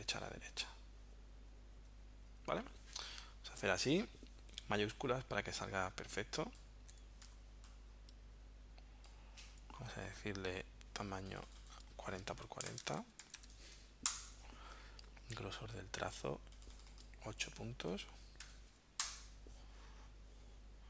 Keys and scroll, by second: 1.9 Right, 2.3 Left, 7.2 v, 12.2-13.7 typing, 14.1 Return, 18.5 8, 19.2 Return.